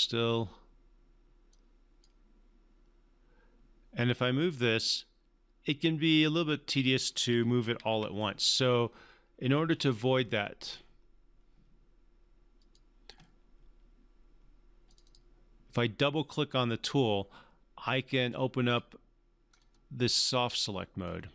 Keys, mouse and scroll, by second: 1.5-2.1 drag, 7.8 ctrl+z, 12.6 click, 15.0 click, 18.6 click, 19.5-19.9 scroll down 1.